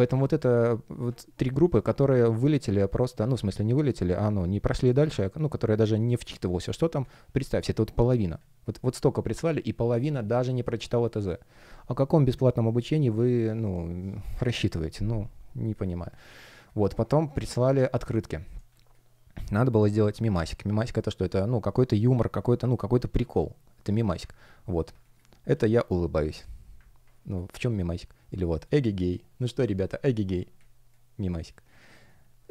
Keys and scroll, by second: 5.7 space, 6.9 space, 15.8 space, 18.6 space, 24.9 space, 27.1 space, 30.5 space.